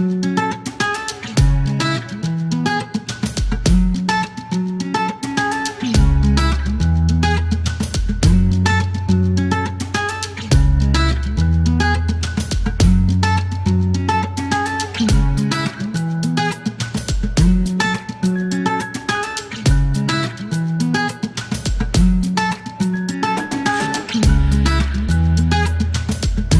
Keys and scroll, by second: 1.8 o, 1.9 q, 3.5 KP_0, 6.0 alt+e, 6.6 space, 9.7 alt+e, 10.3 KP_9, 11.5 typing, 12.9 e, 14.3 alt+q, 14.6 alt+q, 20.8 space, 23.6 typing, 23.8 alt+z, 26.1 alt+q.